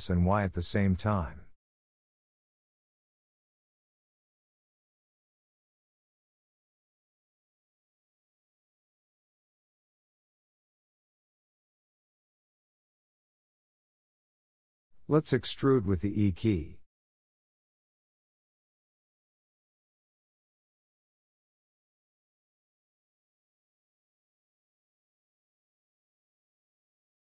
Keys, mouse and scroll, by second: 0.9 1, 1.4 click, 1.8 shift+middle click, 2.4 click, 3.8 click, 5.1 shift+click, 5.8 s, 8.3 click, 9.1 s, 12.0 2, 12.4 click, 14.3 click, 14.7 e, 16.6 s, 18.2 s, 19.8 e, 20.7 s, 23.4 click, 24.1 shift+middle click, 24.4 e, 25.7 s.